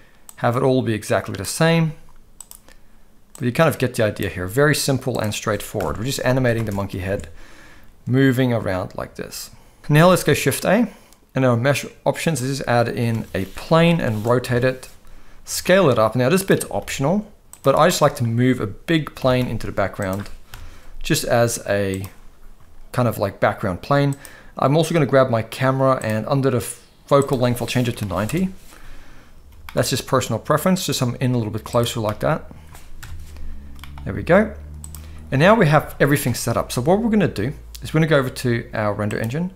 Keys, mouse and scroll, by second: 0.3-1.4 drag, 1.8 g, 3.4-4.2 drag, 5.1 click, 5.8 KP_0, 6.4 ctrl+s, 6.6 space, 7.1 alt+a, 9.8 ctrl+s, 9.8 space, 10.1 shift+a, 13.1 r, 15.4 s, 16.6 s, 17.9-18.2 middle drag, 19.2 g, 20.5 KP_0, 21.2 s, 27.2-28.3 drag, 29.5 g, 30.9 g, 32.0 middle click, 33.0 KP_0, 33.7 g, 35.5 ctrl+s, 35.7 ctrl+s, 39.1 click.